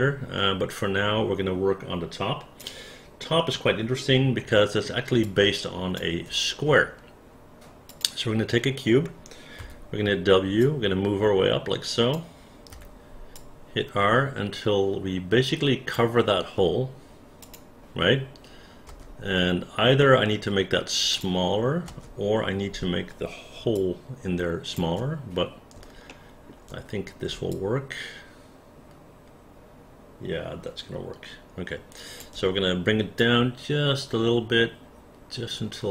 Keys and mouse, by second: 3.4-4.8 alt+middle drag, 5.3 alt+click, 10.6-12.1 drag, 10.6 w, 12.7 r, 13.4-16.0 drag, 17.4 click, 18.9 space, 21.1 click, 21.9 space, 23.8 alt+click, 26.1 alt+middle click, 27.5-32.2 alt+drag, 33.2-35.9 drag.